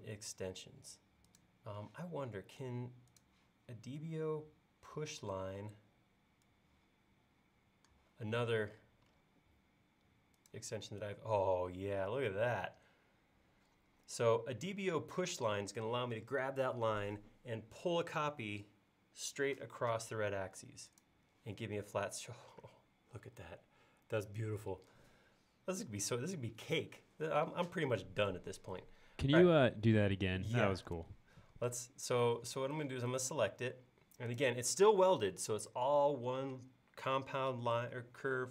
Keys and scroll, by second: 27.5 space, 31.0 super+z.